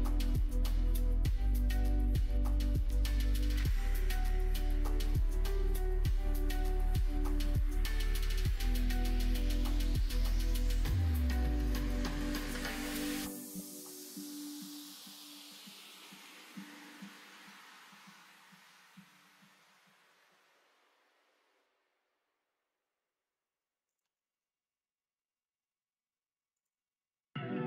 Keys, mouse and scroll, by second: 0.3 middle click, 0.7 ctrl+r, 1.6 middle click, 2.4 alt+space, 3.8 click, 5.2 click, 5.9 ctrl+e, 8.2 middle click, 8.6 click, 9.6 middle click, 9.9 middle click, 10.5 click, 11.3-13.3 drag, 13.5 ctrl+z, 14.4 g, 17.2 click, 18.5 shift+click, 19.6 shift+middle click, 20.9 e, 23.8 e, 27.5 e.